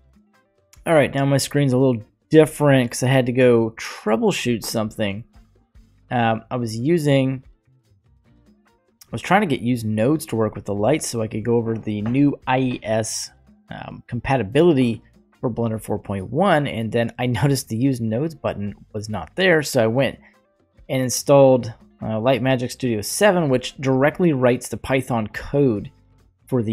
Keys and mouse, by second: 1.7 click, 6.2-7.1 middle drag, 13.3-14.5 middle drag, 22.0 click.